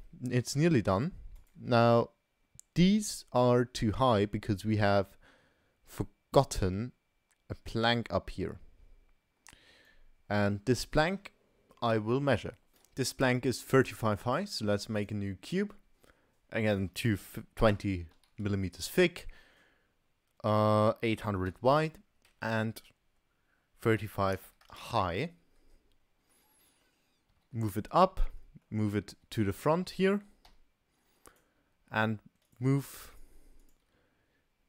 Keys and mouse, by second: 0.1-0.5 middle drag, 1.0 shift+click, 1.3 shift+click, 2.8 g, 6.0 middle click, 7.9-9.9 drag, 13.3 middle click, 14.1 shift+a, 16.8-25.8 drag, 21.9 0, 22.3 Tab, 26.4 click, 26.5 middle click, 27.3 g, 28.3 click, 29.2 g, 32.5 click, 33.2 shift+click, 33.6 shift+click.